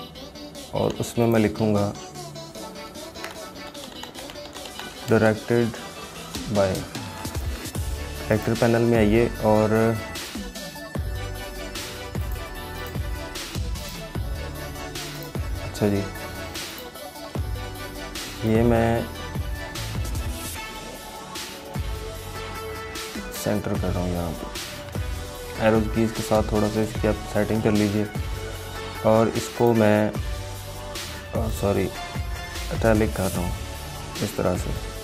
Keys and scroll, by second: 1.8 ctrl+a, 7.2 ctrl+a.